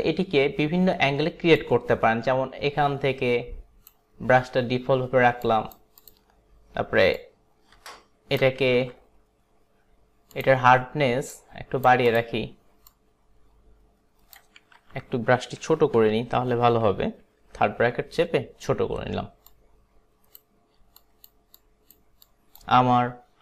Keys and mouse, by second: 1.7 click, 5.5 click, 6.1 click, 7.2 click, 8.8 ctrl+z, 10.3 click, 11.3 click, 12.1 click, 12.9 click, 14.8 ctrl+z, 19.5 click, 21.1 click, 21.6 click, 22.3 click.